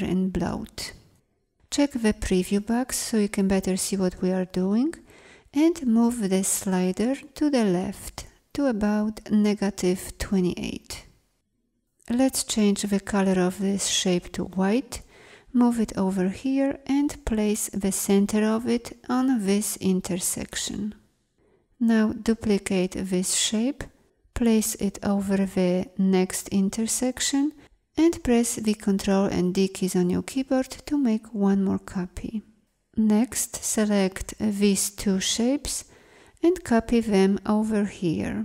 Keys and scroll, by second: 16.2 ctrl+0, 28.9 ctrl+d.